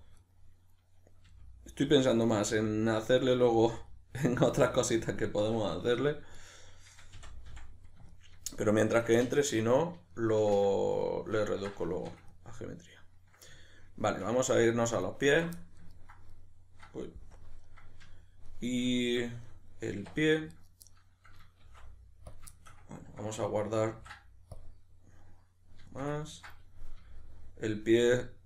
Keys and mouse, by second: 0.2 right click, 1.3 g, 2.0 click, 2.3 right click, 2.4 g, 3.0 click, 3.2 right click, 3.3 g, 3.9 click, 4.3 right click, 4.4 g, 5.1 click, 6.0 2, 6.4 right click, 7.1 f, 8.1-15.3 ctrl+middle drag, 15.3 alt+right drag, 15.6-20.5 middle drag, 17.4 KP_Decimal, 20.0 1, 20.5 right click, 20.8-21.6 middle drag, 21.6 shift+d, 22.4 click, 22.5 shift+middle click, 23.9 ctrl+s, 25.8 shift+middle click, 27.0-28.1 middle drag, 27.0 g, 28.1 click, 28.3-28.4 middle drag.